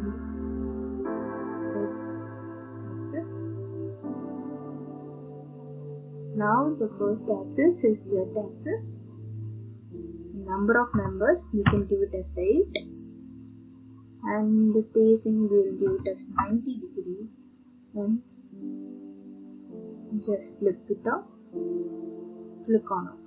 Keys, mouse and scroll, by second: 1.3 click, 2.8 click, 7.9 click, 10.0 click, 10.9-16.8 typing, 14.2 click, 14.9 click, 19.7-20.5 typing, 20.5 click, 22.8 click.